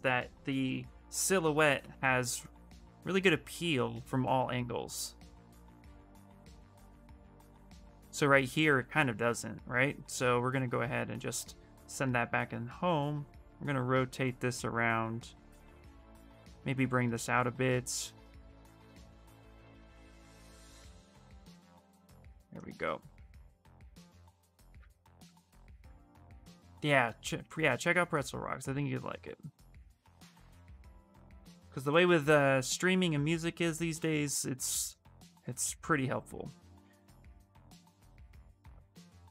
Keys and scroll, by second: 8.1 w, 20.5 q, 21.8 w, 24.4 q, 31.4 b, 35.4 s.